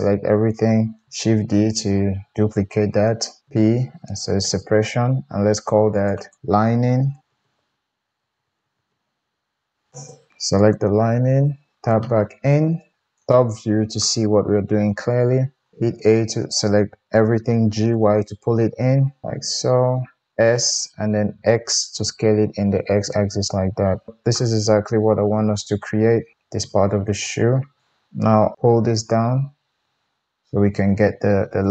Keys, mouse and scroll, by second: 1.4 shift+d, 3.4-5.9 middle drag, 3.4 p, 5.9 click, 6.0 middle click, 6.2-10.7 drag, 7.2 BackSpace, 10.3 Tab, 10.7-17.6 middle drag, 11.4 Tab, 12.9 KP_7, 15.7 a, 17.6 g, 20.3 g, 20.3 s, 23.9-30.4 shift+middle drag, 28.7 g.